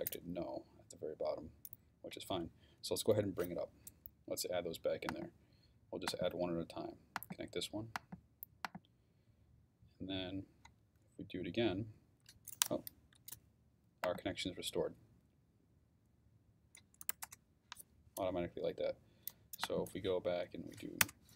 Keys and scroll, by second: 16.8-17.6 typing, 20.3 Up, 21.0 Return.